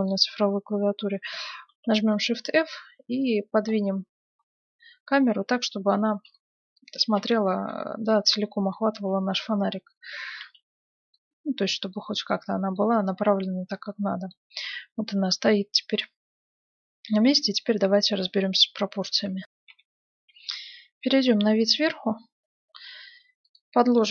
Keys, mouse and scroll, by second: 1.7 shift+f, 11.9-16.7 middle drag, 19.7 F9, 21.7 KP_7, 23.0-24.1 middle drag, 23.4-24.1 right drag.